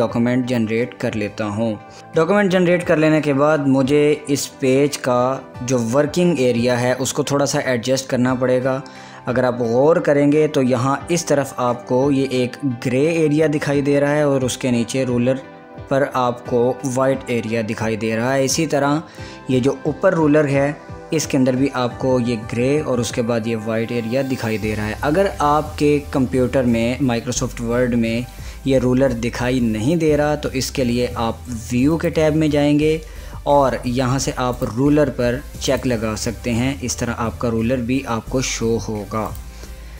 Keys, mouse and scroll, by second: 32.1 click, 36.2 click, 39.4 click.